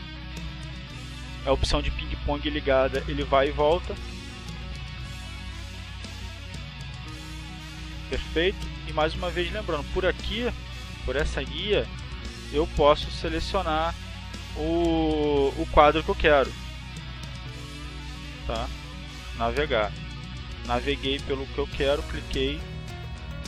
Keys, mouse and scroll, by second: 0.0 click, 3.0 click, 4.1 click, 5.2 click, 6.3 click, 11.1 click, 11.9 click, 12.6 click, 13.1 click, 13.6 click, 14.9 click, 17.1 click, 18.6 click, 21.2 click, 22.5 click.